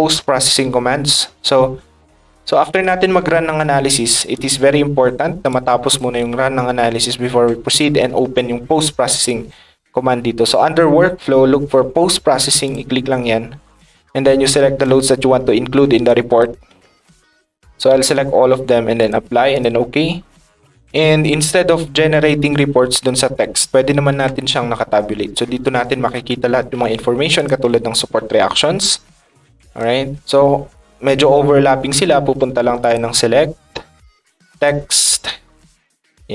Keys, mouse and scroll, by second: 4.3 ctrl+click, 5.5 ctrl+click, 12.6 click, 16.0 ctrl+click, 19.0 click, 19.5 click, 27.3 click, 28.5 middle click, 28.5 scroll down 1, 32.8 click, 34.5 click, 35.0 click, 36.0 click.